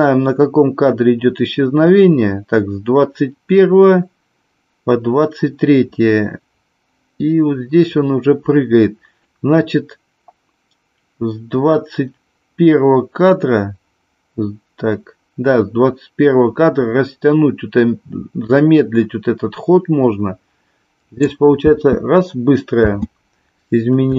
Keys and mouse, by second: 21.7 space, 22.9 space.